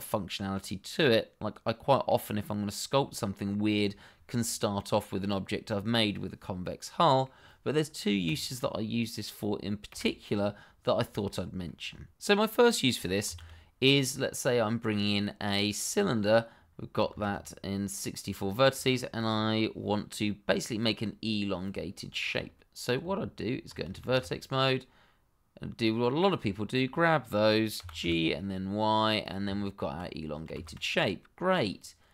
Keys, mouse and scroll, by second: 4.5 middle click, 5.9 middle click, 8.2 click, 9.9 Delete, 10.7-11.2 scroll down 1, 11.2 middle click, 11.8 scroll up 1, 12.1 shift+middle click, 13.2 shift+a, 15.9 click, 16.5-16.9 scroll down 1, 17.1 shift+z, 17.4 middle click, 18.5 shift+middle click, 18.6 middle click, 18.7 shift+middle click, 20.2 middle click, 21.6 click, 22.1 shift+middle click, 22.1 middle click, 22.2 shift+middle click, 22.3-23.0 shift+scroll up 1, 23.0 Tab, 24.0 shift+z, 24.3 click, 26.5 shift+middle click, 26.6 middle click, 26.6 shift+middle click, 27.7 g, 28.0 y, 29.2 click, 29.4 Tab, 31.5 click.